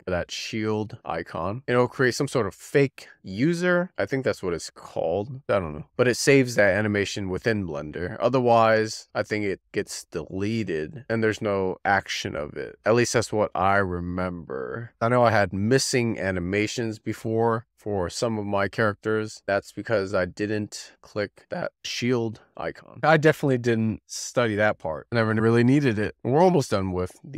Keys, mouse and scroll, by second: 26.7 click.